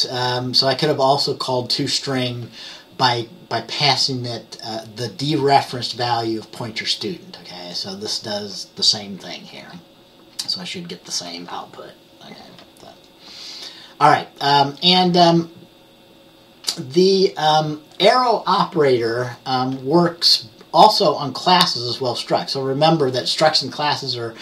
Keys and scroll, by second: 9.7 F10.